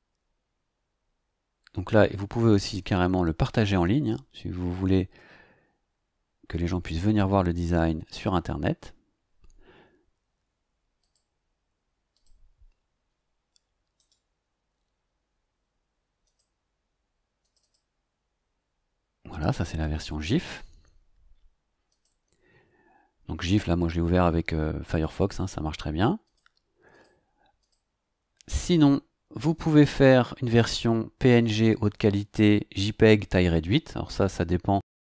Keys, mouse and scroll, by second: 11.0 click, 12.1 click, 14.0 right click, 16.2 click, 17.4 click, 21.9 click, 26.2 click, 26.9 click, 27.6 click, 29.4 click, 30.6 scroll up 1.